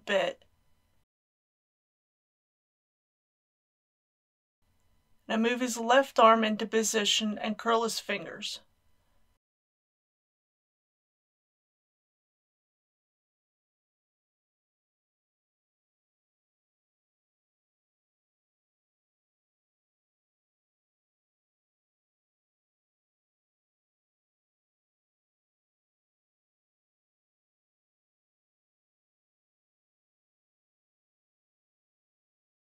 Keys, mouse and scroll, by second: 2.5 shift+click, 4.6 middle click, 5.7 click, 6.9 g, 8.6-9.7 drag, 9.1 r, 12.3 click, 12.5 middle click, 13.4 r, 13.8 click, 14.8 g, 16.2 click, 16.4 r, 16.9 click, 17.0 middle click, 17.5 scroll up 1, 17.8 middle click, 18.3 middle click, 19.5 click, 19.8 r, 20.3 click, 20.8 r, 20.9 z, 21.7 click, 21.8 r, 22.8 x, 22.9 click, 23.0-23.5 scroll up 3, 23.9 click, 24.2 r, 24.8 click, 24.9 r, 25.0 x, 25.6 click, 26.1 r, 26.7 click, 26.8 r, 26.9 x, 27.5 click, 28.4 typing, 29.0 click, 29.7-30.5 typing, 30.4 click, 31.3 click, 32.0-32.6 typing, 32.5 click.